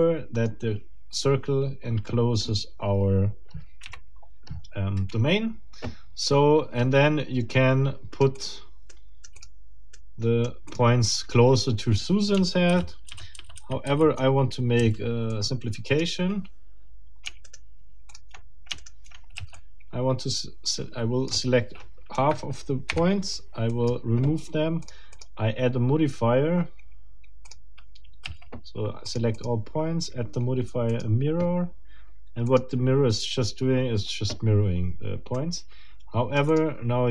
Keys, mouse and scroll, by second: 0.0 click, 3.8 KP_1, 6.0 scroll down 2, 6.8 scroll up 2, 7.5 right click, 8.4 middle click, 8.9 right click, 9.4 middle click, 10.0 right click, 10.7 click, 12.7 ctrl+z, 14.8 ctrl+c, 15.3 ctrl+middle click, 17.4 shift+right click, 18.1 shift+click, 18.8 shift+right click, 19.4 shift+c, 19.6-21.5 shift+drag, 22.1 Escape, 22.9 Delete, 23.7 click, 24.8 click, 27.4 click, 28.2 a, 29.1 click, 30.9 click, 32.5 click, 35.4-36.8 right drag, 36.5 click.